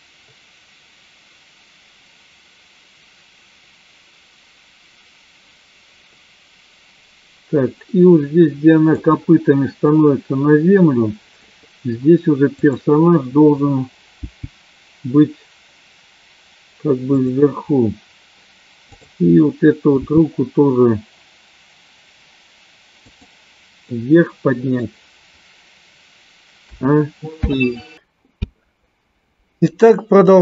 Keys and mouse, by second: 12.6 click, 14.1 g, 19.0 click, 20.2 g, 24.0 middle click, 27.7 i.